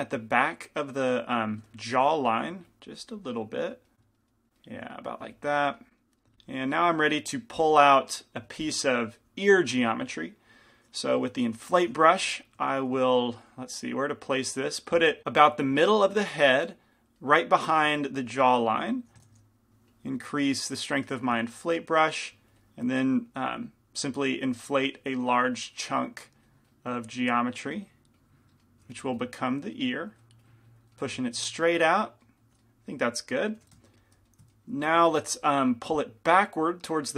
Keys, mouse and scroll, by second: 0.0-1.9 drag, 2.1-4.5 drag, 2.6-5.5 middle drag, 5.5-8.3 drag, 12.1 i, 12.1 f, 12.8 f, 18.4 f, 19.4 shift+f, 20.4 shift+f, 21.6-22.7 drag, 22.3 shift+f, 23.5 f, 24.3-27.9 drag, 29.0-32.4 drag, 29.0-31.2 middle drag, 29.0 f, 33.9 g, 33.9 f, 34.9-37.1 middle drag, 35.4 f, 36.4-37.1 drag.